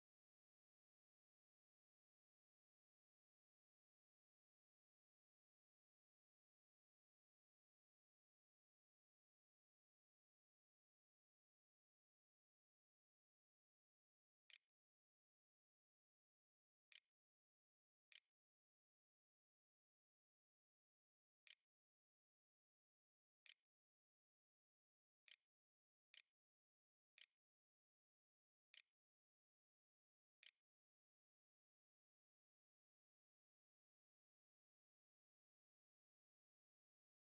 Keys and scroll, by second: 13.2-18.7 typing, 20.0 a, 20.4 q, 20.9 Tab, 21.5-32.3 typing.